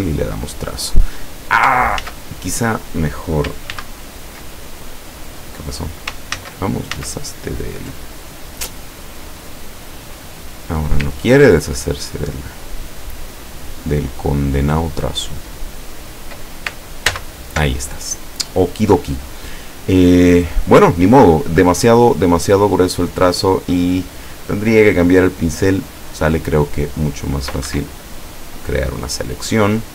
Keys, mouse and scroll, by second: 2.1 ctrl+z, 3.8 ctrl+z, 6.4 ctrl+z, 10.1 click, 11.8 ctrl+scroll down 2, 12.7-13.1 ctrl+scroll up 2, 13.8-14.2 ctrl+scroll down 2, 14.7-15.2 ctrl+scroll up 2, 17.1 ctrl+z, 25.8 click, 27.7 Escape, 28.4 click.